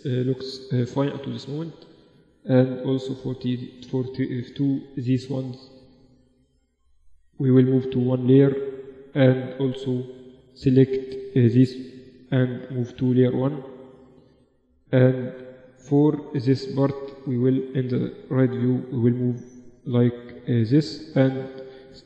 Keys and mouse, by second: 0.4 t, 1.3-3.8 drag, 2.0-4.6 right drag, 3.2 t, 4.6 click, 4.8 middle click, 5.2 right click, 5.5 middle click, 6.4 right click, 7.0 middle click, 7.2 m, 8.7-10.6 drag, 9.6 a, 9.8 a, 10.2 a, 11.1 m, 12.9-16.0 drag, 17.0 KP_3, 18.8-20.6 drag, 21.0-22.0 drag.